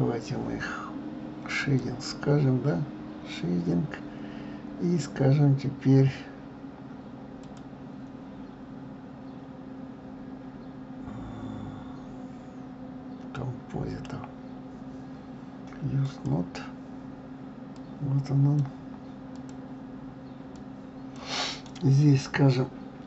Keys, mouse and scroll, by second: 1.8 click, 16.1 click.